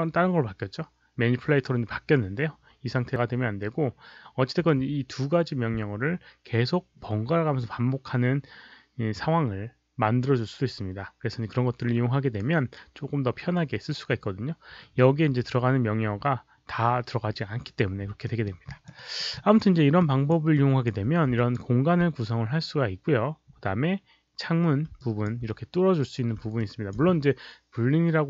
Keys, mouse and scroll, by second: 18.2 alt+middle click, 18.6 alt+click, 18.9 alt+right click, 19.3 alt+click, 20.0 alt+click, 20.0 alt+right click, 20.0 alt+middle click, 20.5 alt+click, 21.3 alt+click, 25.0 alt+drag, 26.5-26.9 alt+drag.